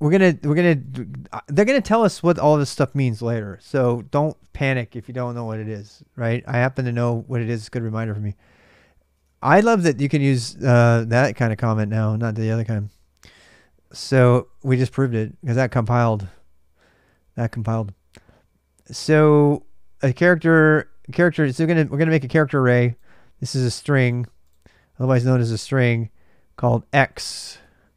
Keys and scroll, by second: 8.9 super+BackSpace, 12.6 super+BackSpace, 27.3 super+BackSpace.